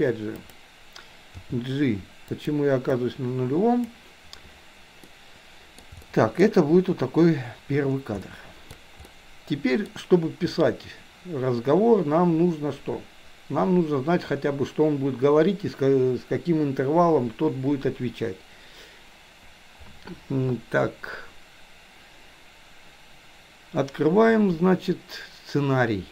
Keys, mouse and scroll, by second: 0.3 click, 1.3 g, 2.9-3.9 drag, 5.1-5.8 middle drag, 6.2 shift+middle click, 8.3-8.8 shift+middle drag, 9.1-9.9 middle drag.